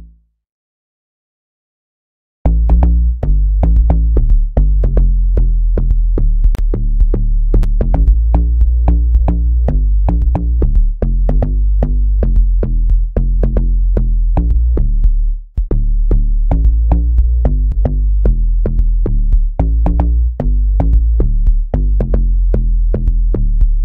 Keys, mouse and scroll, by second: 6.8 click, 9.7 click, 10.5 click, 18.9 click.